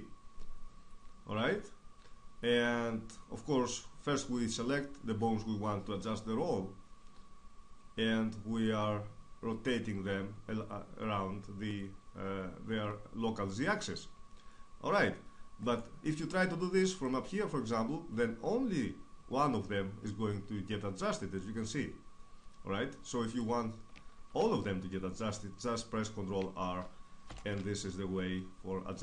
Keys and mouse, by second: 13.3 right click, 14.6-19.8 drag, 21.8 ctrl+z, 24.8 ctrl+r, 27.5-29.0 drag.